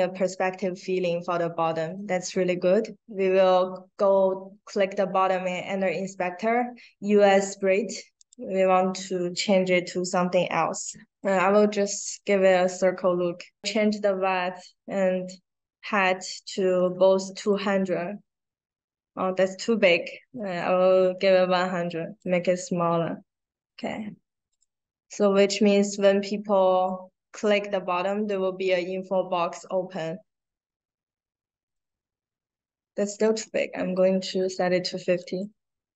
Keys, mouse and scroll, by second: 0.1 click, 1.8 click, 9.3 middle click, 9.3-9.7 scroll up 1, 10.1 middle click, 10.1-10.5 scroll down 1, 11.0 scroll up 1, 11.1 click, 12.0 click, 17.4 click, 19.6 click, 20.3 drag, 21.8 drag, 24.4 click, 31.5-33.3 drag, 35.1 click.